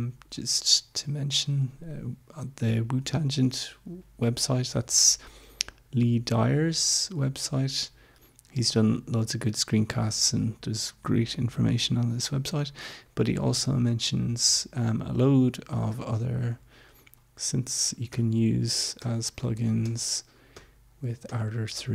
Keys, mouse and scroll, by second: 1.1 click, 7.4 scroll down 2, 8.4 scroll down 1, 14.9-15.7 scroll down 4, 17.4 Page_Down, 18.1 Page_Down, 19.3 Page_Down, 19.8 Page_Down, 21.5 Page_Down.